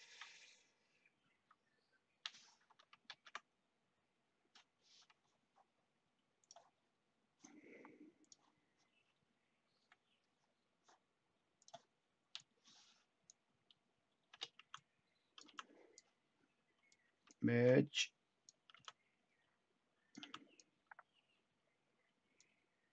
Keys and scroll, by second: 1.3 Delete, 3.0 ctrl+z, 9.7 Delete, 14.3-15.4 typing, 17.4 ctrl+w, 18.7 t, 20.1 t.